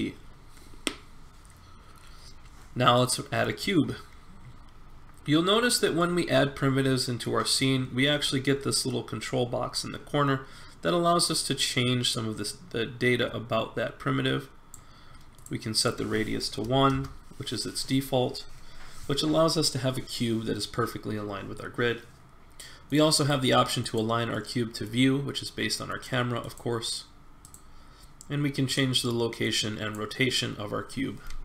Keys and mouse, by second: 4.5 middle click, 6.0-8.0 middle drag, 11.1-13.0 drag, 15.3-17.6 drag, 19.1-21.1 middle drag, 22.9 click, 24.3-25.6 middle drag.